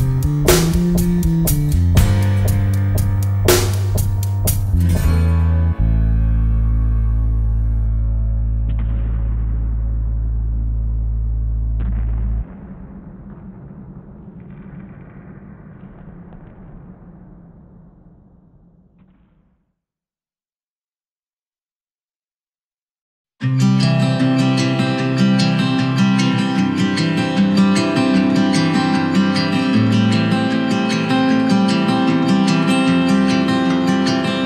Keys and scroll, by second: 3.3 super+c, 5.2 super+f.